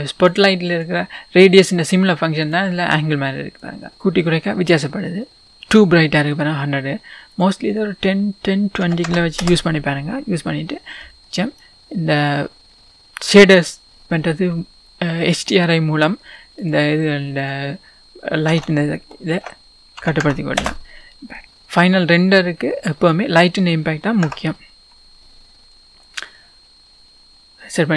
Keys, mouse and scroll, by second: 0.7 click, 2.4 click, 3.7-5.5 drag, 5.5-9.4 middle drag, 5.9-8.5 scroll up 2, 9.4-11.3 drag, 9.5 Return, 10.6-11.3 scroll down 1, 11.3-20.6 middle drag, 11.8-12.7 scroll up 2, 12.7-13.8 scroll down 2, 13.8-15.6 scroll down 1, 15.6-19.1 scroll down 1, 20.6-22.7 drag, 20.6 BackSpace, 20.7 Return, 21.4-21.8 scroll up 2, 21.8-22.7 scroll down 1, 22.7-27.9 middle drag, 23.4 scroll up 2, 24.2 KP_0, 25.2-26.3 scroll up 2, 26.3-27.9 scroll up 1.